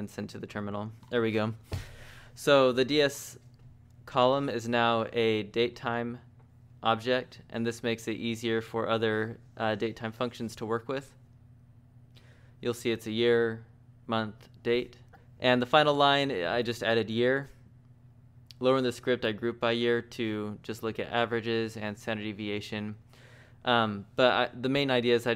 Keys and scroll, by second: 0.0-1.6 typing, 21.1 j, 21.3 j, 22.6-24.3 typing.